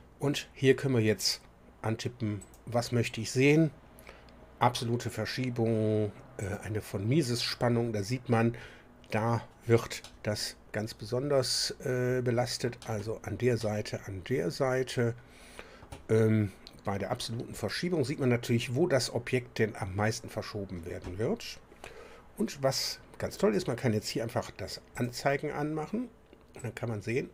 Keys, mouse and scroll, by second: 2.4 click, 6.4 click, 10.0-13.1 middle drag, 13.5-16.0 middle drag, 17.5 click, 21.8-22.1 scroll down 1, 24.9 click, 26.6-27.3 drag.